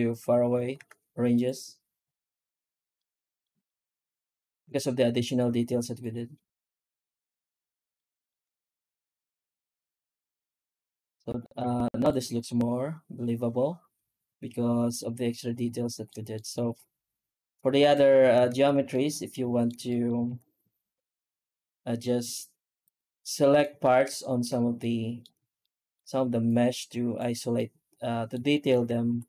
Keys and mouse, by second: 0.6 z, 2.8 middle click, 3.3 middle click, 3.5 middle drag, 4.0 z, 5.0 z, 7.8 shift+middle drag, 8.2 shift+middle click, 8.4 middle drag, 11.5 z, 14.8-15.9 middle drag, 15.9 middle click, 16.2 shift+middle drag, 16.4 shift+middle click, 17.7 right click, 18.0 Tab, 18.4 alt+shift+z, 18.8 middle click, 19.7 shift+middle click, 20.1 alt+a, 20.9 ctrl+r, 23.4 middle click, 23.6 1, 24.0 middle click, 24.7 middle click, 25.5 middle click, 26.4 click, 27.4 middle click, 28.4 shift+middle click, 29.0 3.